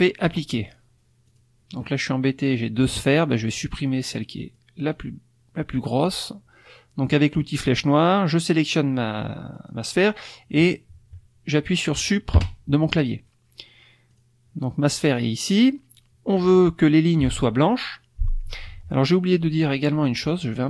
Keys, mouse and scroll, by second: 0.2 click, 1.3 click, 2.8 click, 4.0 click, 4.5-5.9 drag, 7.7 click, 9.5 click, 12.3 Delete, 14.1 click, 19.5 click.